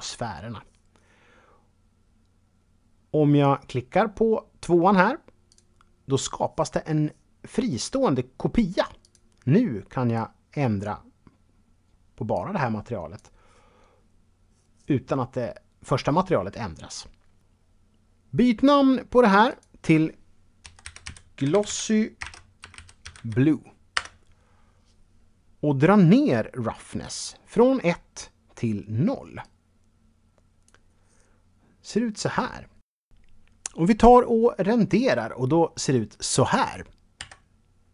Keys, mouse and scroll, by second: 5.5 click, 9.0 click, 10.1 click, 12.3 click, 19.5 click, 20.6-23.1 typing, 23.9 Return, 29.4 click, 37.2 F12.